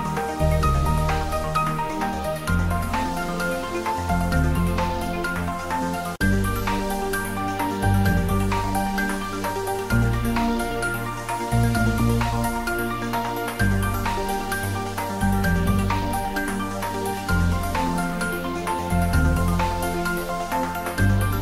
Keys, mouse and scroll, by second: 2.1 s, 4.0 click, 4.3 ctrl+middle click, 4.9 shift+middle click, 5.2 ctrl+middle click, 5.7 s, 6.4 click, 6.7 g, 7.9 click, 8.3 ctrl+middle click, 8.7 ctrl+shift+middle click, 10.0 shift+middle click, 10.8 g, 11.3 Left, 11.7 Down, 11.9 Right, 12.5 Left, 13.2 Up, 13.9 Down, 14.2 Up, 16.6 Return, 17.3 click, 18.3 s, 19.0 click, 19.4 s, 19.9 click, 20.1 g.